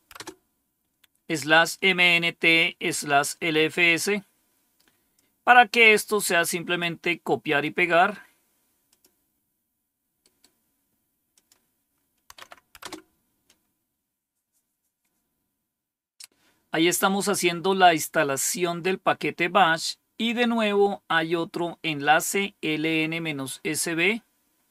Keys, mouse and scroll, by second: 0.1 Return, 5.0-6.7 drag, 7.4 right click, 8.8 click, 10.1 right click, 11.2 click, 12.3 Tab, 12.7 Return.